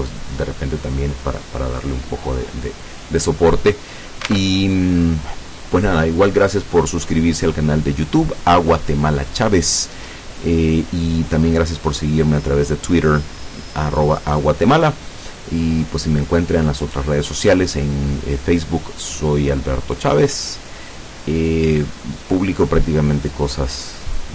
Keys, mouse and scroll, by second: 4.3 alt+Tab.